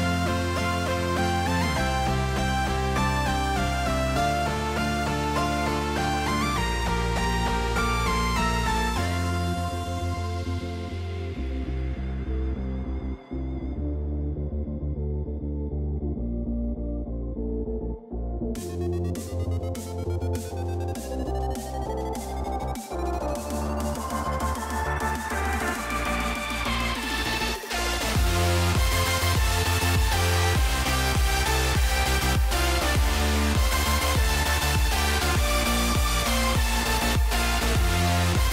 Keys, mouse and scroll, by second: 0.1 middle click, 0.6 click, 0.9 click, 1.4 click, 1.8 middle click, 2.4-4.1 drag, 5.1 middle click, 6.4 middle click, 7.4 u, 11.8 shift+middle click, 13.0 middle click, 13.7 shift+middle click, 14.9 g, 19.6 middle click, 20.8 g, 22.2 s, 24.6 click, 25.7 s, 28.1 shift+middle click, 28.9 shift+click, 29.5 s, 31.4 shift+middle click, 32.5 s, 34.0 shift+middle click, 35.9 shift+middle click, 36.5 middle click, 38.4 shift+middle click.